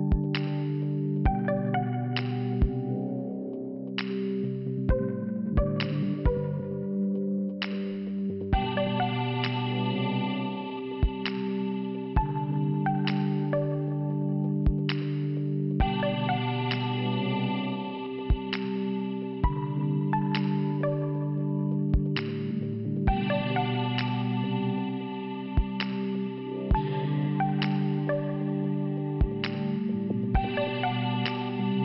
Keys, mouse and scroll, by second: 1.7 click, 3.4 click, 5.1 click, 6.6 0, 7.1 Return, 9.2 click, 14.6 click, 14.8 click, 15.0 click, 15.4-15.7 scroll up 2, 15.7-16.1 scroll down 2, 17.9 click, 18.0 click, 19.8 p, 21.9 click, 26.0 click, 27.5 click, 27.6 click, 29.5 click, 29.6 click, 30.8 click.